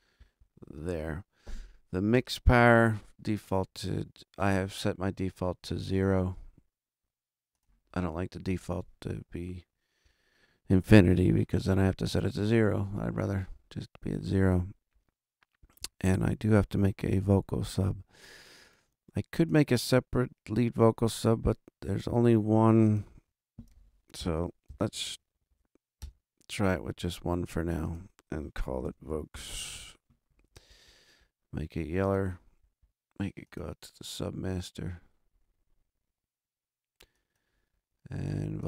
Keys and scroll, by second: 24.1 shift+super+n, 24.9 shift+super+Right, 25.1 super+Down, 25.9 super+Return, 28.6-29.8 typing.